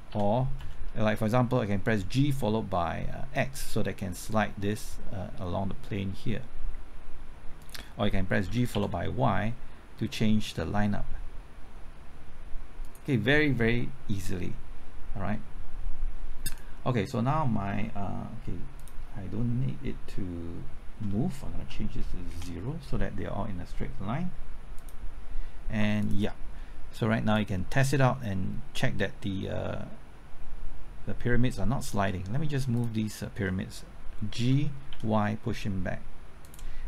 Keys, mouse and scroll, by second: 0.1 g, 0.6 x, 8.5 g, 8.7 y, 21.6 KP_0, 22.3 KP_Enter, 27.5 Return, 34.4 g, 34.9 y.